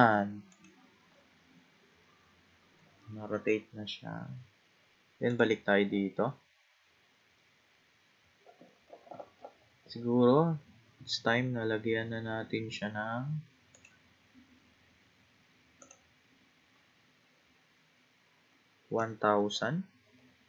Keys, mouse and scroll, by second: 0.5 click, 1.6-4.6 scroll down 19, 5.3 click, 6.4-8.3 scroll down 9, 8.3-10.2 scroll up 30, 10.2-10.8 scroll down 3, 10.8-12.1 scroll up 7, 12.1-13.7 scroll down 3, 13.7 click, 15.8-18.9 drag, 19.5 0.